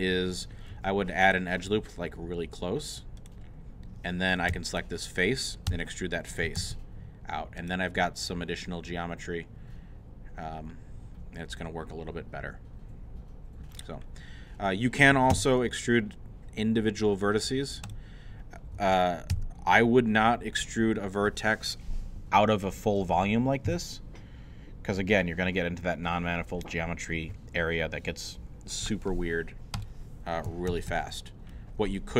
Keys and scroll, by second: 0.7 ctrl+r, 4.5 3, 5.7-7.1 typing, 15.3 l, 19.3 e, 30.7 ctrl+z.